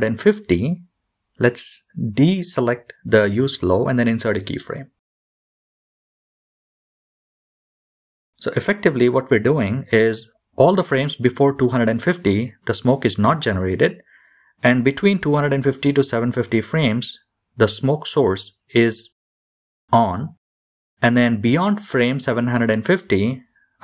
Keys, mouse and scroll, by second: 6.6 click, 7.1 i, 17.7 click, 21.4 click.